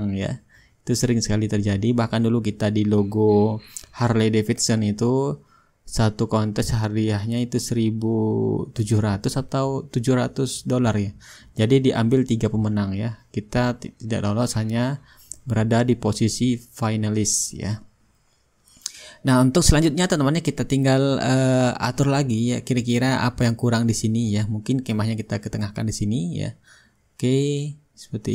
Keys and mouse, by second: 1.6-3.8 drag, 4.6-5.7 drag, 5.8-7.1 drag, 7.1-8.2 drag, 8.8-14.5 drag, 9.4 shift+right click, 11.1-14.5 right drag, 14.9-16.7 drag, 15.8 shift+right click, 16.7-19.6 middle drag, 19.6-24.0 drag, 24.7 ctrl+g, 25.1-28.3 drag.